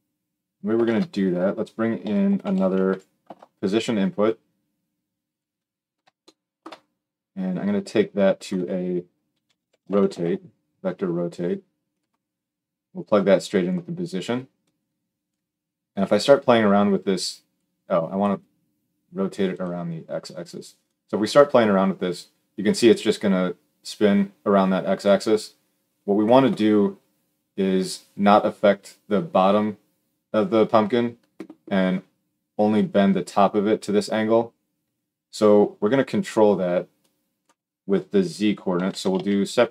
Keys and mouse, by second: 0.6 shift+a, 7.7-11.8 drag, 12.8-39.7 drag.